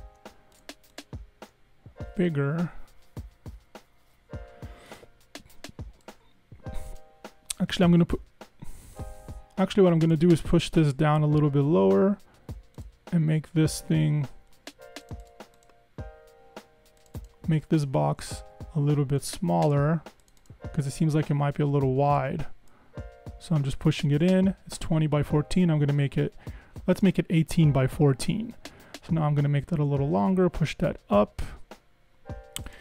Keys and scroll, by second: 9.2 Escape, 9.3 Escape, 11.0 Down, 11.2 Down, 18.7 Right, 19.3 Escape, 21.7 Right, 22.0 Escape, 22.2 Escape, 25.7 super+Left, 26.0 super+Left, 29.2 super+Down, 29.5 super+Down, 30.0 Up, 30.3 Up.